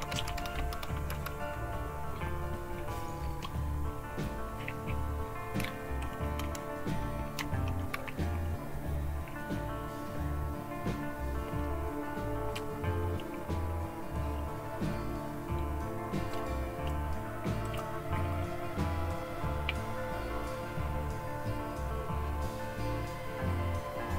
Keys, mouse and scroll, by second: 0.0-1.1 typing, 6.2 super+1, 17.7 click.